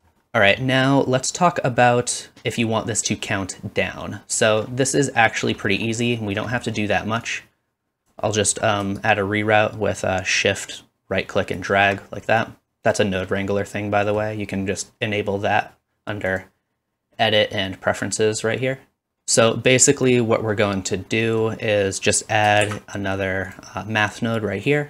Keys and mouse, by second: 0.0-12.5 drag, 0.0 space, 9.1-12.5 shift+right drag, 20.4-22.1 middle drag, 21.7-24.1 drag, 21.7 right click, 22.6 shift+d.